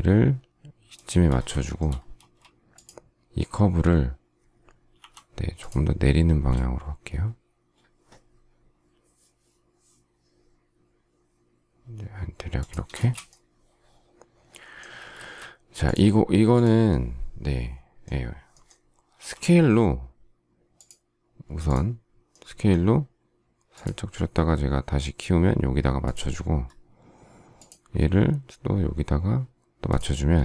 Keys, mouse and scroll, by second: 0.9 shift+click, 1.6 shift+middle click, 2.1 space, 4.9 m, 12.5 shift+click, 12.9 space, 19.1 s, 30.3 space.